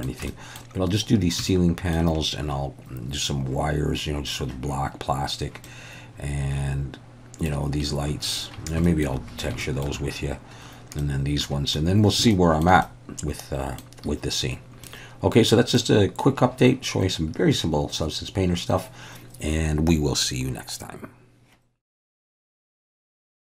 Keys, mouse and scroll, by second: 0.4 middle click, 1.5 shift+middle click, 5.7-7.5 middle drag, 8.9 shift+middle click, 9.7 shift+middle click, 11.0 middle click, 12.0 click, 12.9 middle click, 14.9 middle click.